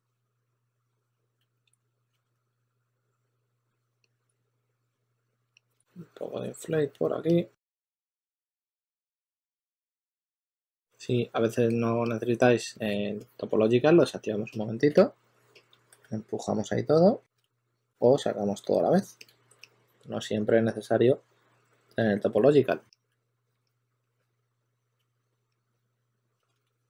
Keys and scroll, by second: 1.1-3.6 typing, 9.0 super+z, 9.9-11.0 typing, 14.8 s, 16.0 2, 17.3 super+z, 19.5 s, 23.0 s, 24.9 s, 26.3-26.8 typing.